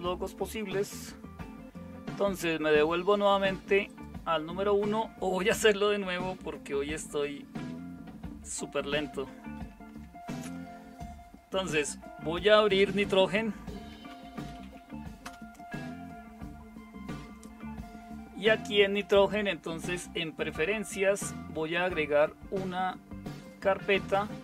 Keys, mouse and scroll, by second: 9.5 super+w, 12.7 super+space, 13.6-15.3 typing.